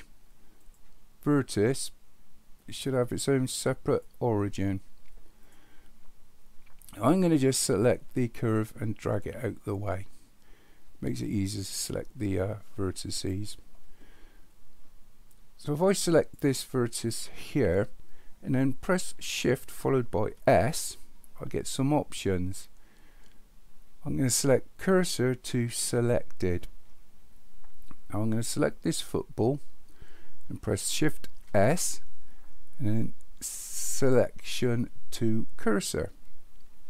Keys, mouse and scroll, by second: 2.6 click, 5.4 click, 9.8-13.3 drag, 16.3 click, 20.3 shift+s, 28.8 click, 31.4 shift+s.